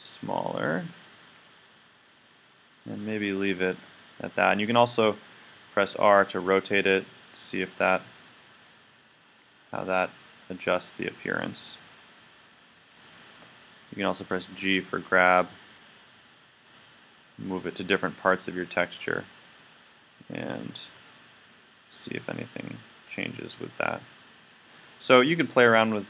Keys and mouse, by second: 5.9 r, 7.9 click, 8.4 click, 8.5 click, 14.7 g, 16.8 click, 17.9 click, 18.1 click.